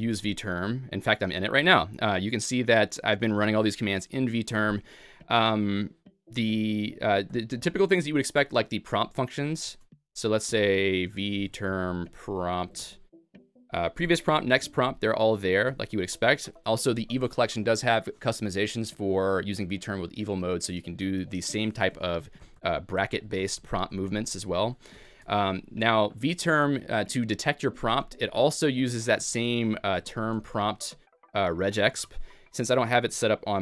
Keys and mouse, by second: 24.9 }.